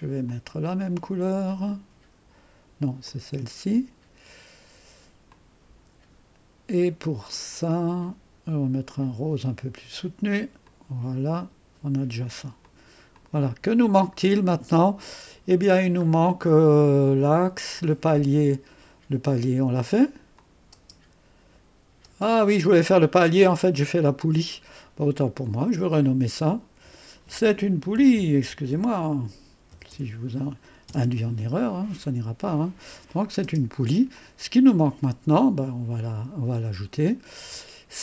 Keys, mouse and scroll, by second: 0.2 click, 1.5 click, 3.0 click, 5.3-6.7 drag, 7.3 click, 9.4 click, 10.7-12.0 drag, 12.6-13.7 drag, 16.3-16.9 scroll down 2, 16.9-17.9 scroll down 1, 20.3 click, 20.7 space, 23.3-25.3 scroll up 1, 25.4 click, 25.8 click, 26.7 F2, 27.7-30.4 typing, 30.8 Return, 33.0 click, 33.4-34.2 typing, 34.1 click, 36.3 click, 37.3-37.8 scroll down 1, 37.6-38.0 typing.